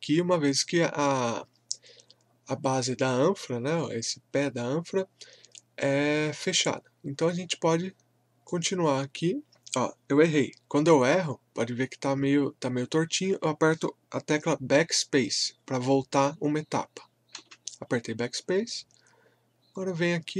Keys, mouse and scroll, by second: 5.1-5.5 scroll up 1, 8.5 click.